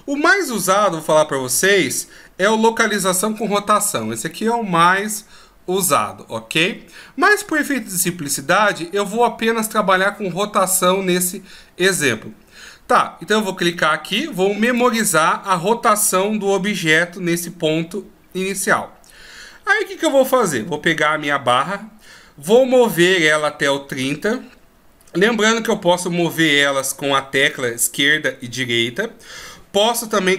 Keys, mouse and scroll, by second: 22.8 click, 27.9 Left, 28.3 Right.